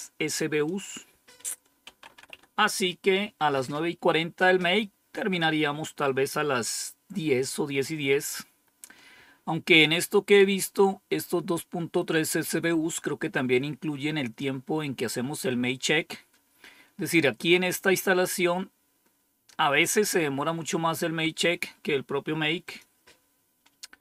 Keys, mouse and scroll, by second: 0.5 click, 1.5-2.7 typing, 22.5 click.